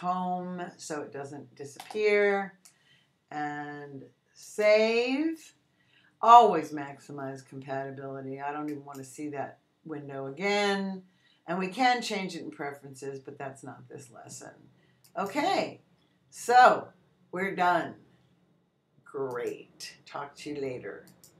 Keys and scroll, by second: 1.7 Return.